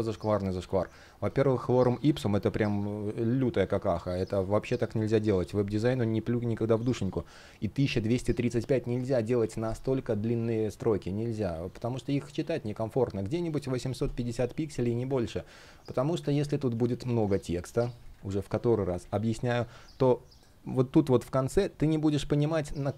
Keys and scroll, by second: 14.8 super+z, 17.0 super+a, 17.9 super+v.